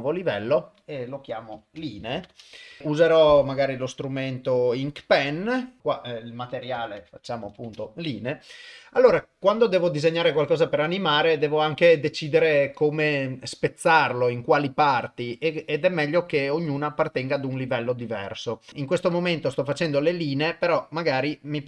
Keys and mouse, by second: 0.4-2.4 drag, 2.1 e, 3.5-4.7 drag, 5.8-7.7 drag, 7.4 e, 17.6 click.